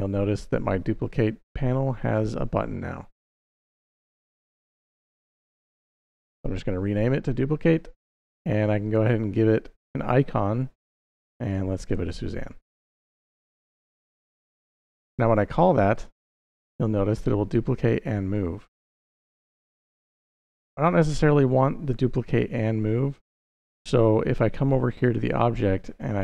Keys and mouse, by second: 3.0-6.2 drag, 8.6-12.2 drag, 15.7 click, 19.0 click, 24.8-26.2 drag.